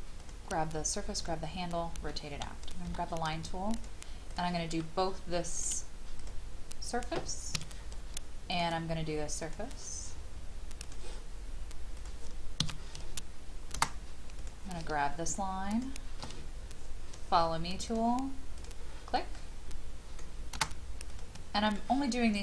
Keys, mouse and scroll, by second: 0.2 shift+click, 1.2 click, 2.6 scroll up 1, 3.7 click, 7.5 Escape, 8.5-10.5 drag, 12.6 Escape, 14.4 click, 15.7 shift+click, 17.9 click, 19.1-20.7 middle drag, 20.7 space, 21.1 click, 21.7 shift+click.